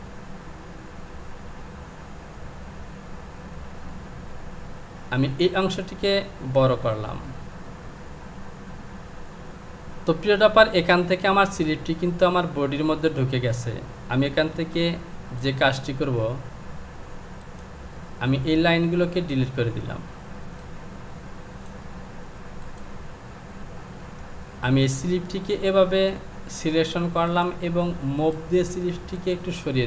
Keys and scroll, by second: 5.1 Delete, 14.6 Delete.